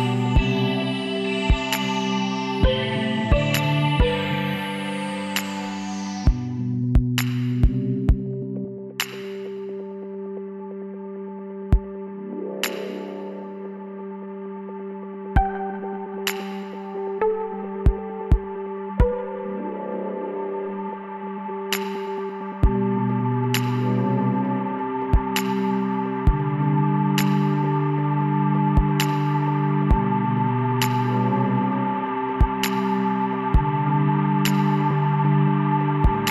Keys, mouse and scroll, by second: 4.1-7.7 middle drag, 5.6 w, 9.8 Tab, 10.2 middle click, 11.1 a, 14.3-16.0 middle drag, 16.0 Tab, 18.0-20.8 right drag, 19.9 w, 24.4-27.9 middle drag, 27.9-30.4 drag, 30.4 w, 32.6 w, 35.7 Tab.